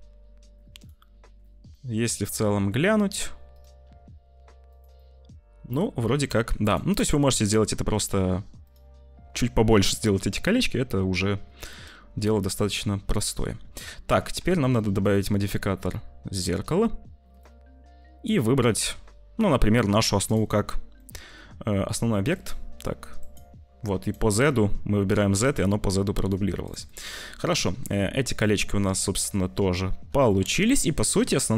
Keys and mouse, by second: 0.7 click, 0.9 click, 1.7 click, 3.8 s, 4.9 click, 5.1 middle click, 6.9 middle click, 7.8 click, 8.5-11.9 drag, 13.6 `, 14.4 ctrl+s, 15.0-17.3 drag, 18.2 click, 21.0 click, 22.2 click, 23.1 click, 23.9 click, 24.2 click, 25.4 click, 26.6 click, 26.8 click, 27.2 middle click, 28.3-29.4 middle drag, 30.3 shift+middle click, 30.7 middle click.